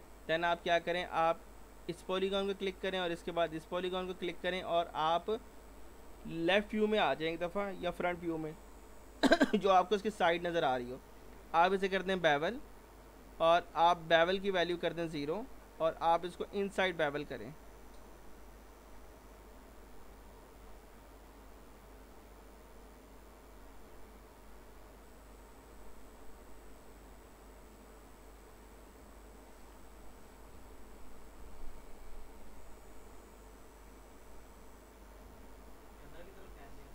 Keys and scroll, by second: 6.4 l, 7.8 f, 8.2 z, 30.5 F4, 31.4 F3, 35.2 f, 36.5 F3.